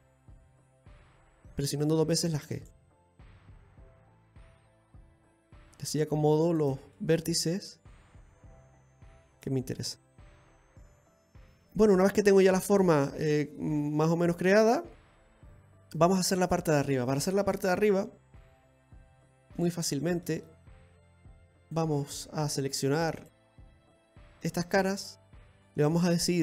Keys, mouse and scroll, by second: 1.3 middle click, 3.0 right click, 3.0 g, 4.8 right click, 5.2 g, 7.0 middle click, 8.1 right click, 8.3 g, 10.3 right click, 10.5 g, 11.5-12.0 scroll down 1, 12.0 middle click, 16.8 scroll down 2, 17.2 middle click, 17.8 shift+middle click, 18.4-18.9 scroll up 3, 19.0 shift+middle click, 19.6-20.0 scroll up 1, 20.0 middle click, 20.5 shift+middle click, 21.6 click, 22.4 right click, 23.2 shift+right click.